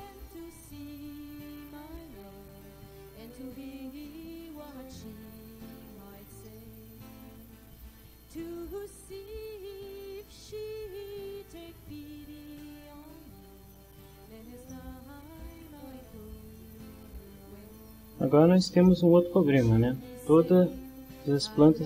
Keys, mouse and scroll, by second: 0.3 click, 1.5 click, 2.4 click, 4.7 middle click, 6.4 middle click, 8.4-9.6 drag, 10.2 click, 14.7 shift+middle click, 18.8 middle click, 20.0 middle click, 21.1-21.8 middle drag.